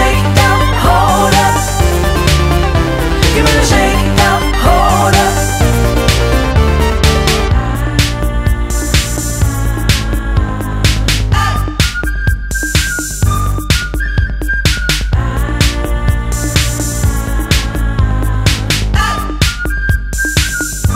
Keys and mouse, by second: 5.5 click, 7.6 click, 8.7 click, 8.7 click, 12.2 click, 15.0 click, 16.5 click, 18.7 click, 18.8 click.